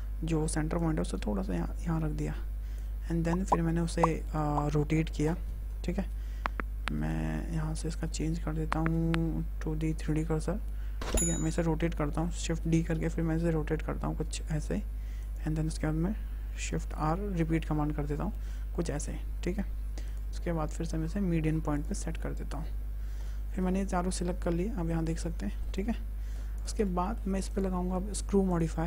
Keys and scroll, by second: 12.4-13.2 typing, 16.7 shift+r, 23.0 a, 25.1 Tab.